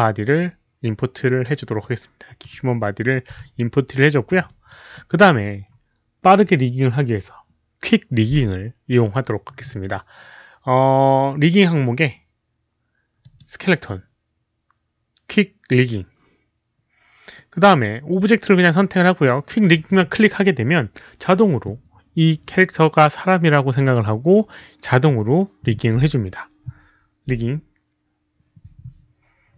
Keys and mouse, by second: 0.2 click, 1.4 click, 2.3 click, 2.3 right click, 3.3 w, 4.4 alt+drag, 4.6 alt+w, 4.6 right click, 4.9 alt+middle click, 7.8 alt+middle click, 7.8 alt+click, 7.8 right click, 7.8 w, 10.1 alt+middle click, 10.1 alt+click, 10.1 w, 11.1 click, 12.7 alt+middle click, 12.7 w, 13.2 click, 15.2 alt+middle click, 15.7 click, 17.3 click, 19.6 click, 26.5 click, 28.1 click.